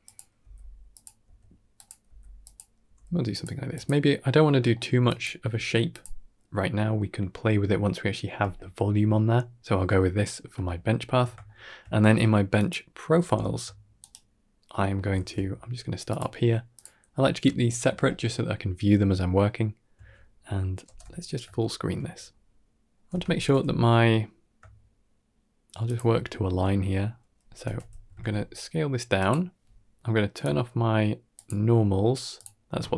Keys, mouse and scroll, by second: 0.0-3.4 typing, 4.6 shift+middle click, 4.9 click, 5.4 g, 9.6 Tab, 10.5-11.0 ctrl+middle drag, 11.3 shift+middle drag, 12.4 click, 13.8 shift+right click, 14.6 shift+middle drag, 15.0 shift+a, 17.4 shift+middle drag, 20.7 ctrl+space, 21.5 shift+middle click, 22.0-22.5 scroll up 2, 22.5 shift+middle click, 23.1 Tab, 23.4 g, 26.0 shift+middle click, 27.5 Tab, 27.9 a, 28.0 s, 30.2 click.